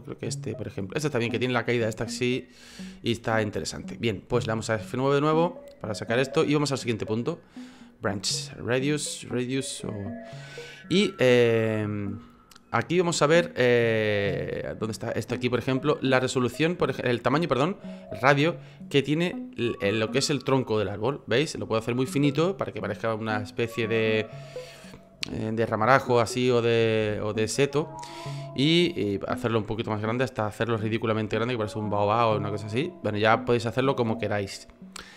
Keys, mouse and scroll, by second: 3.3-3.9 scroll down 1, 3.9-4.3 scroll up 1, 4.3 F9.